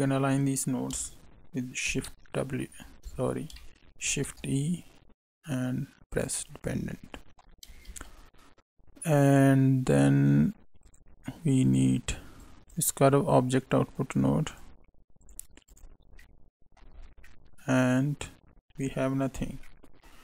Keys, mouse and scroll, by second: 1.8 shift+w, 4.0 shift+e, 6.8 middle click, 7.8 shift+a, 12.3 click, 12.6 click, 13.0 click, 15.2 click, 15.6 click, 16.1 middle click, 17.0 scroll down 4, 17.2 middle click, 19.6 middle click.